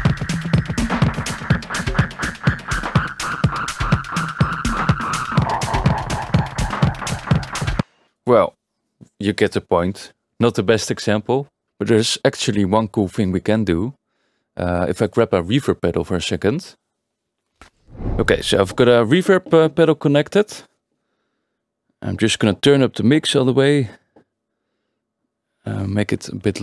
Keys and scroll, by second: 5.2 Return, 7.8 space.